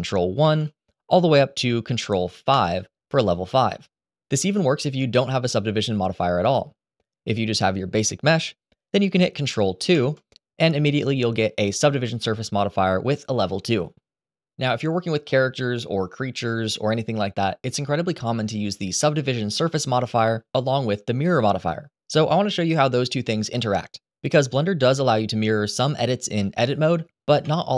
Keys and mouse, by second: 0.1 ctrl+1, 2.3 ctrl+5, 5.8 click, 9.7 ctrl+2, 27.1 Tab.